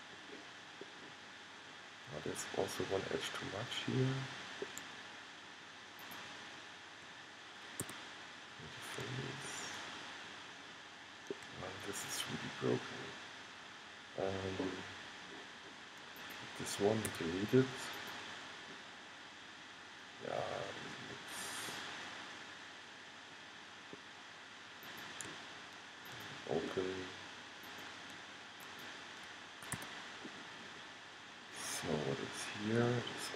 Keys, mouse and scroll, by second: 0.1-2.0 middle drag, 2.9-5.6 middle drag, 6.1-7.9 drag, 7.9 f, 9.6-11.2 middle drag, 11.3 middle click, 11.9-14.9 middle drag, 16.3-18.1 right drag, 17.2 x, 19.0 middle click, 21.8-22.9 middle drag, 23.7-25.0 middle drag, 29.9 f, 30.3 middle click, 32.3 middle click.